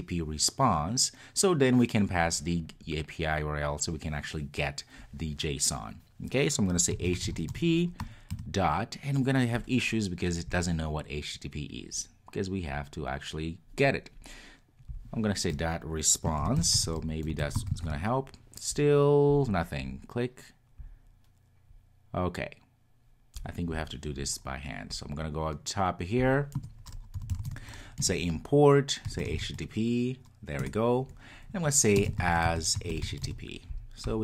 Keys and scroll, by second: 28.0 Return.